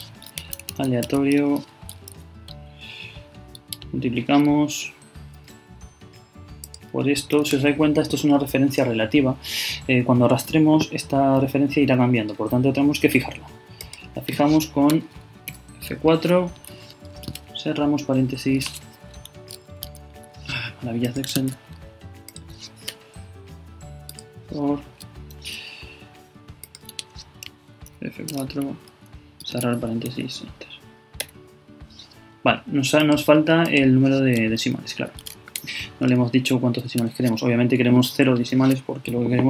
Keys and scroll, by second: 0.4 shift+a, 3.3 shift+Right, 3.5 shift++, 17.2 shift+9, 19.8 super+z, 21.4 super+z, 29.1 shift+Right, 29.4 shift+9, 30.1 shift+Return, 35.0 shift+Left, 35.2 shift+,, 35.5 shift+space.